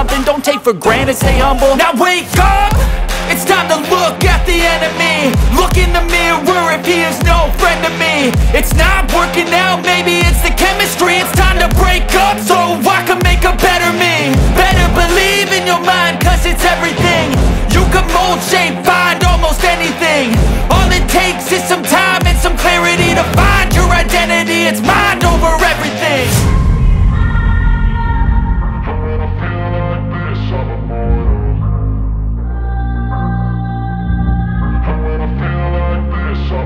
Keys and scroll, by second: 0.9 F3, 1.6 F2, 6.4 e, 6.8 Escape, 7.8 F4, 11.8 ctrl+g, 14.2 F2, 15.1 shift+Page_Up, 17.5 F3, 21.2 ctrl+g, 23.2 shift+F2, 23.9 shift+Page_Up, 24.7 F3, 25.4 F2, 26.4 F3, 26.9 F2, 27.2 F3, 27.5 F2, 29.3 F3, 31.7 Escape, 32.3 alt+v, 32.4 alt+s, 33.0 alt+v, 33.1 alt+e.